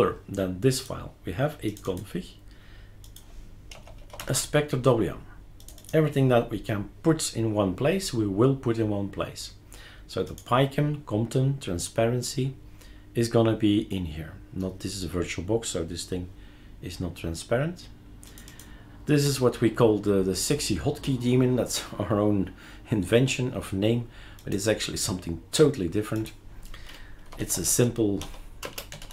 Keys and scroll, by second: 3.7-4.9 typing, 27.0-29.1 typing.